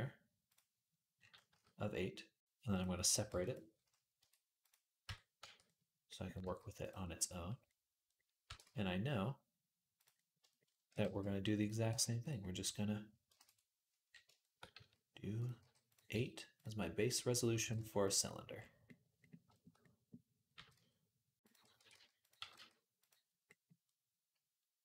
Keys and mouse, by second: 0.3 click, 0.4 middle click, 1.3 s, 3.1 p, 4.0 Tab, 4.9 Tab, 5.2 a, 6.2 g, 6.4-12.2 middle drag, 8.3 r, 10.7 r, 11.7 g, 12.2-14.3 drag, 14.3 shift+middle click, 14.4-17.2 drag, 14.6 s, 15.4 g, 16.0 s, 17.2-24.8 middle drag, 17.4 g, 20.4 g, 21.6 r, 22.2 g.